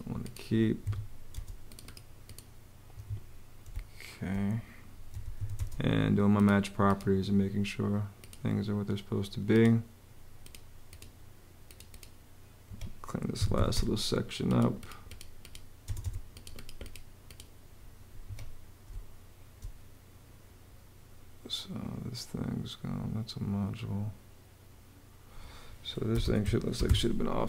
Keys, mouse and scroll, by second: 0.6 Escape, 1.1 space, 1.7 space, 2.7 Escape, 3.5 space, 4.6-5.6 typing, 12.4 Escape, 12.9-13.8 typing, 15.6 space, 18.0 Escape, 18.6 space, 25.6-27.0 typing.